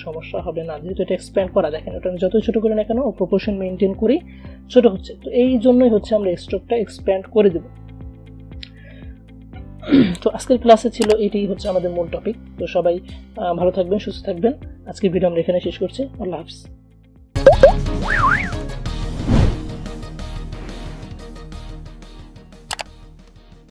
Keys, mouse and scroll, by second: 0.3-1.6 shift+drag, 5.5-7.5 drag, 7.5 Delete.